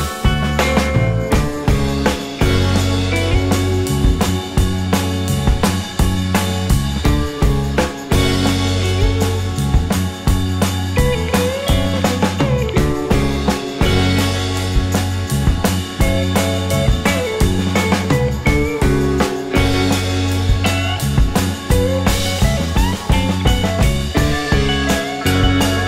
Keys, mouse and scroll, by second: 2.1 g, 2.5 scroll, 2.6 g, 3.6 alt+click, 5.5 right click, 8.4 shift+click, 11.0 g, 12.1 right click, 14.1 shift+click, 17.6 g, 19.0 right click, 20.6 shift+click, 23.0 g, 23.4 scroll, 23.4-23.9 scroll down 2, 23.7 g, 23.9 alt+click, 24.4 right click, 25.4 scroll up 1, 25.7 alt+click.